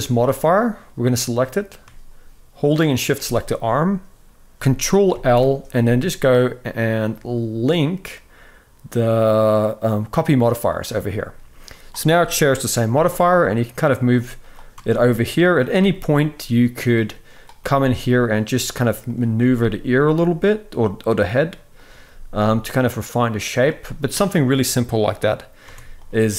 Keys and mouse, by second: 0.8-1.5 drag, 2.5 shift+click, 4.8 ctrl+l, 11.4 click, 11.8 shift+middle drag, 12.6 g, 14.1 click, 14.4 Tab, 15.1 click, 15.4 g, 17.3 g, 18.8 click, 19.1 g, 21.5 click, 21.7 g, 25.4 Tab, 25.7 click.